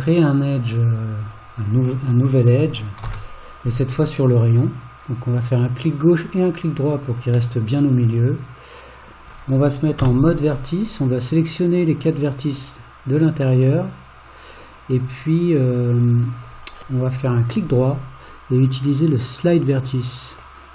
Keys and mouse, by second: 1.2 click, 3.0 ctrl+r, 7.6-9.1 middle drag, 10.0 1, 11.4 click, 17.3-20.7 right drag.